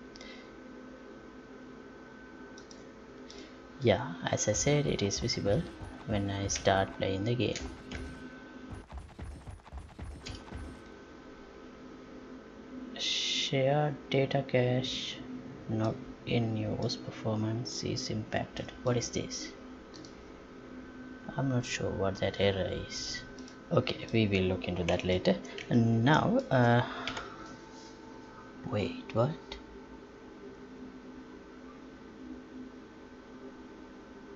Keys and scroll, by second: 13.2 Escape, 27.1 F11.